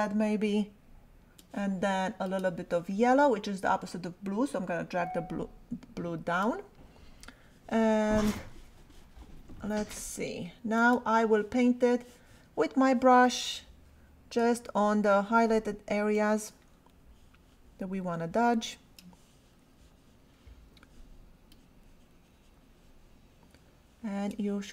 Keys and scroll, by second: 14.4 [, 15.7 ], 20.7 [.